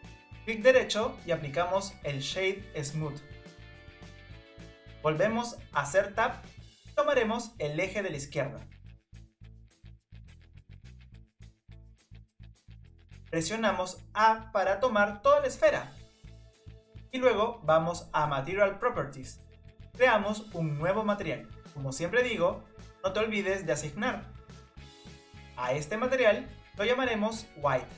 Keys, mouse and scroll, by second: 0.6-5.6 right drag, 5.6 Tab, 6.8 scroll up 2, 9.0 scroll down 1, 9.4 middle click, 10.3 click, 10.6-11.5 scroll up 7, 11.5 click, 11.8-12.4 scroll down 3, 18.7 click, 19.8-24.8 drag, 24.8-27.9 drag.